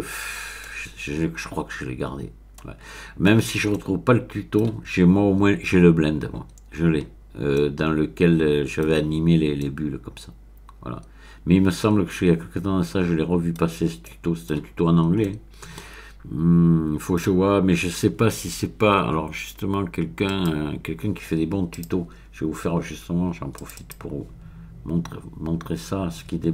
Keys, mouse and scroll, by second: 0.0-0.6 scroll up 1, 0.6-3.4 middle drag, 3.4-3.7 scroll down 1, 3.7-4.7 middle drag, 7.0-7.5 scroll up 1, 7.5-9.2 middle drag, 9.6-13.9 middle drag, 14.0 middle click, 15.2-17.5 middle drag, 20.3 click, 21.7 click, 23.5 click.